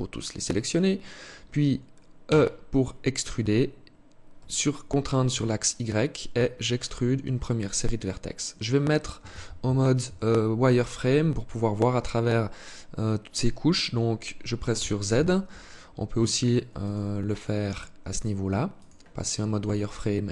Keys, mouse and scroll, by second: 1.5 e, 14.0 z, 15.4 scroll up 1, 16.0 click, 17.3 click, 19.6-20.3 scroll up 2.